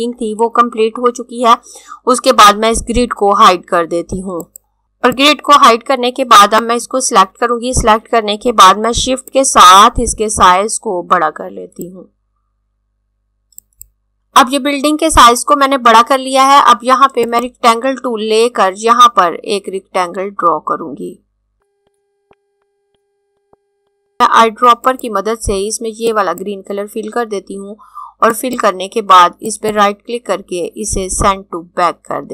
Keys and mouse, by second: 4.2 click, 5.2 click, 9.2 click, 13.3 click, 17.3 click, 21.5 click, 22.2 click, 23.3 click, 23.9 click, 24.9 click, 29.4 right click.